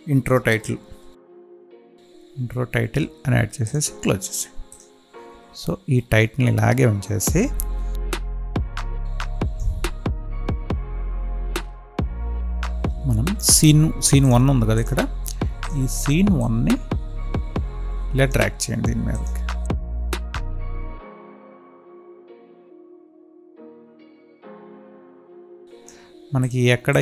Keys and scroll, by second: 1.2 space, 10.3 ctrl+z.